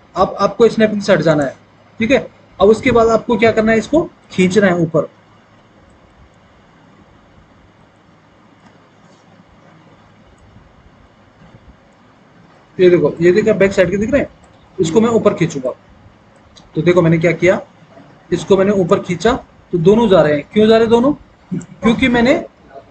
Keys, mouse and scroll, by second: 8.2 alt+w, 8.8 alt+w.